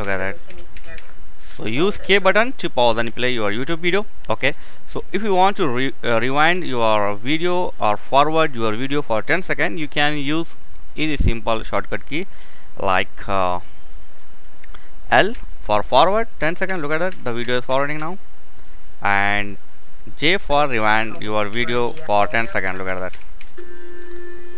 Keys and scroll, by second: 0.0-1.7 typing, 4.0 typing, 14.7 typing, 15.8-17.3 typing, 19.4-24.5 typing.